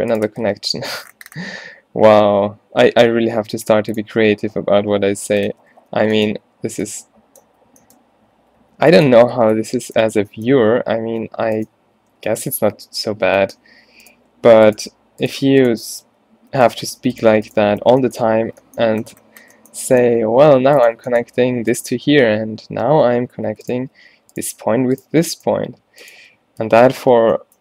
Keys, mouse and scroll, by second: 0.4 f, 4.0 click, 4.7-11.2 typing, 12.3 d, 12.8 f, 13.2 z, 13.9 a, 17.9 f, 18.5 a, 22.8 alt+w, 26.9 f.